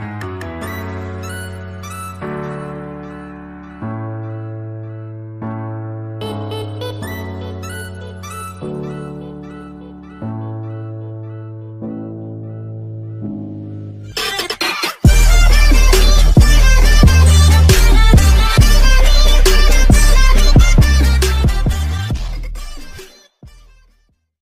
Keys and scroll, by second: 0.3 Down, 0.4 Up, 0.6 Right, 0.7 Up, 6.9 space.